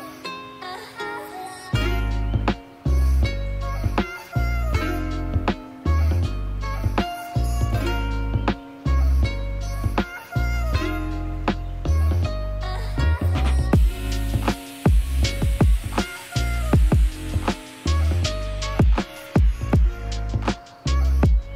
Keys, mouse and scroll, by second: 4.6-18.6 middle drag, 18.8-21.5 drag.